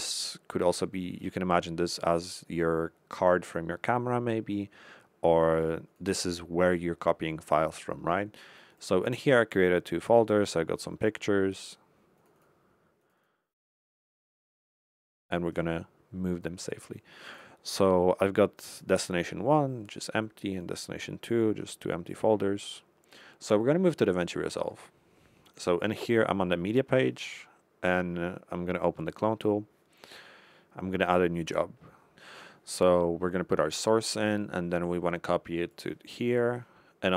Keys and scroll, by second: 31.3 Left, 32.3 Left.